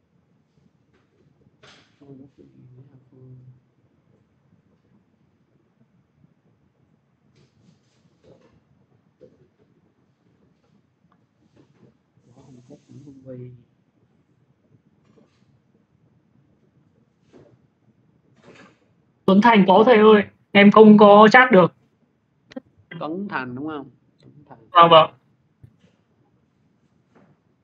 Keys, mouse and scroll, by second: 0.1 click, 3.2 click, 7.2 click, 7.2 x, 7.6 click, 9.7 click, 9.8 x, 10.1 click, 11.3 click, 13.1 click, 14.7 click, 14.8 x, 15.3 click, 16.3 x, 16.9 click, 18.2 click, 19.8 click, 23.0 middle click, 23.4 click, 25.1 click, 25.2 x, 25.5 click, 26.9 click.